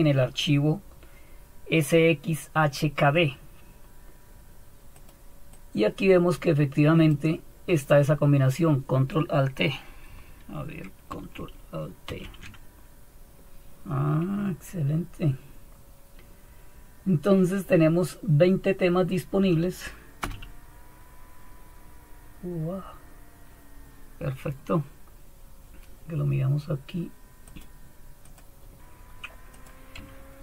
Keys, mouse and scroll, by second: 4.9-12.1 drag, 12.1 ctrl+alt+t, 27.5-28.8 drag, 29.5-30.4 drag.